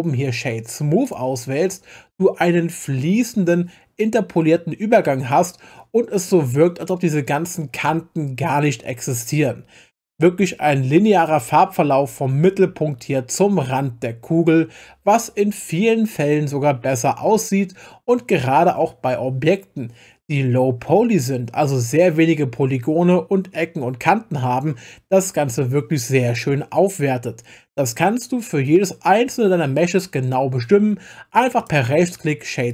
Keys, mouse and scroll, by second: 31.6-32.7 right drag.